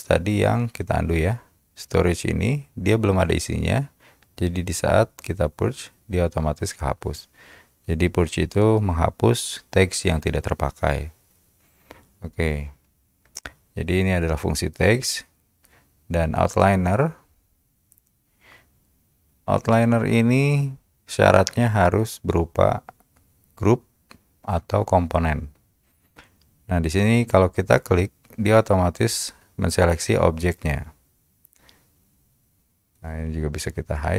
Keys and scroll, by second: 1.1 shift+t, 1.2 ctrl+z.